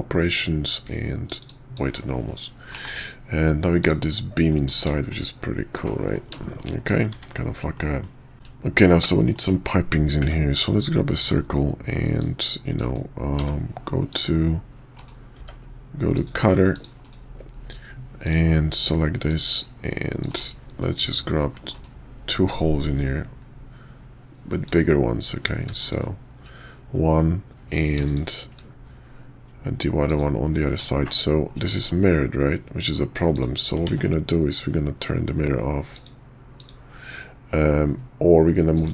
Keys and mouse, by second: 1.5 alt+click, 2.7 /, 3.8 click, 4.5 middle drag, 5.0 shift+click, 5.9 drag, 6.4 shift+drag, 6.7 drag, 7.7 middle drag, 8.7 middle click, 9.2 shift+middle click, 10.2 d, 12.2-12.9 drag, 13.4 d, 15.4 d, 18.2 click, 19.2 click, 21.1 click, 22.5 click, 28.0 shift+click, 30.0 click, 30.9 shift+middle click, 31.9-32.9 middle drag, 33.3 click, 34.0 ctrl+`.